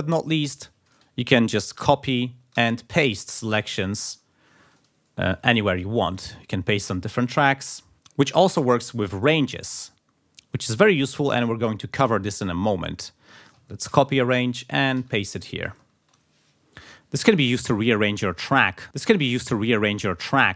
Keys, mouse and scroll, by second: 0.6 click, 1.8 ctrl+c, 2.1 ctrl+click, 2.6 ctrl+v, 3.3 ctrl+scroll down 2, 3.7 ctrl+click, 4.7 click, 5.3-5.6 scroll up 2, 6.1 click, 6.8 ctrl+v, 9.1 r, 10.6 click, 12.7-13.3 scroll up 4, 13.9 ctrl+c, 15.0 ctrl+v, 15.8 ctrl+scroll down 2.